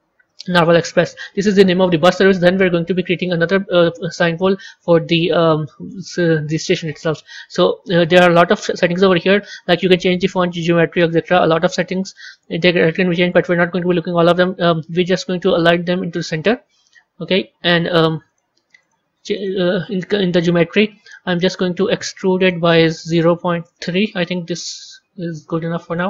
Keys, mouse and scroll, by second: 6.8 Tab, 11.0-11.3 scroll down 2, 13.1-16.1 drag, 18.2-22.2 drag, 22.3-24.7 drag, 24.7-26.0 middle drag.